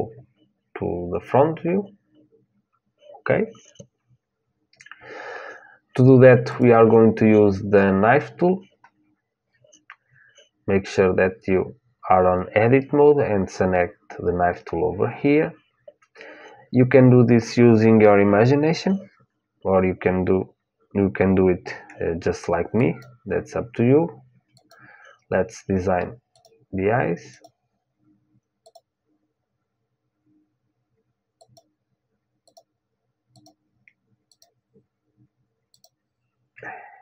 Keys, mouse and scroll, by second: 6.2-8.4 drag, 22.5-24.7 drag.